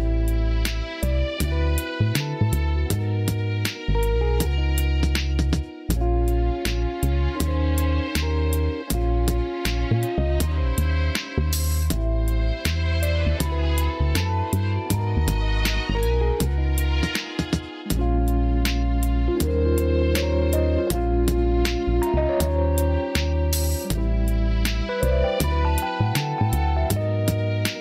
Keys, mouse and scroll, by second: 0.5 g, 1.7 s, 6.3 s, 6.8 z, 9.1 KP_3, 10.2 click, 13.1 r, 13.9 click, 14.3 click, 15.5 s, 16.3 KP_1, 17.3 alt+z, 18.9 r, 19.6 middle click, 20.8 alt+z, 22.3 r, 23.3 click, 25.3 alt+z, 26.7 click.